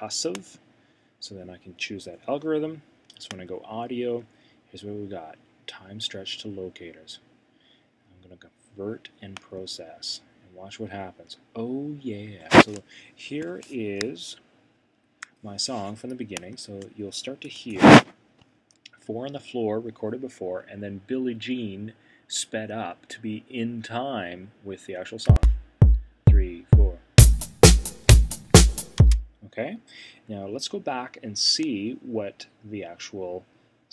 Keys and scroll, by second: 17.5 Return.